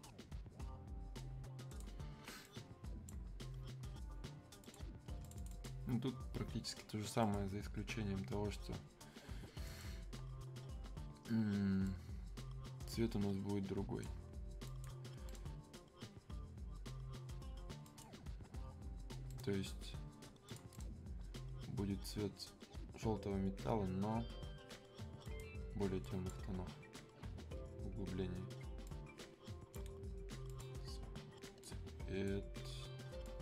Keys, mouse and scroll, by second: 8.2-9.7 scroll down 1, 9.7-14.6 drag, 15.3 right click, 17.8 click, 19.3 right click, 20.5 click, 20.7 right click, 25.2 click, 28.8-33.4 drag.